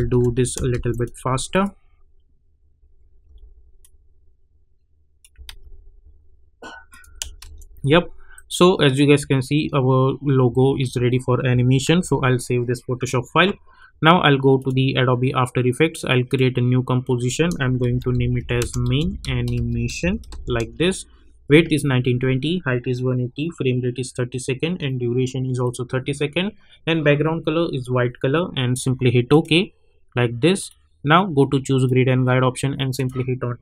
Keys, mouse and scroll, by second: 0.0 ctrl+shift+v, 0.9 ctrl+shift+click, 3.2 m, 3.8-5.4 drag, 5.4 ctrl+x, 6.9 click, 7.4 ctrl+shift+v, 8.3-11.8 drag, 11.8 ctrl+s, 14.5 click, 17.7-20.8 typing, 29.4 click.